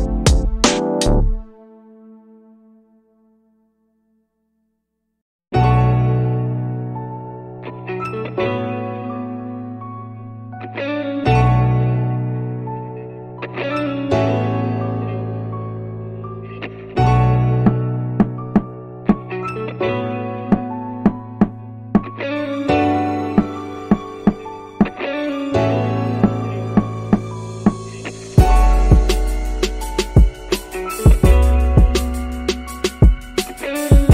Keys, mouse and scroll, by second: 14.3 click, 17.7-21.4 drag, 23.2 click, 32.0 click, 33.7-34.1 drag.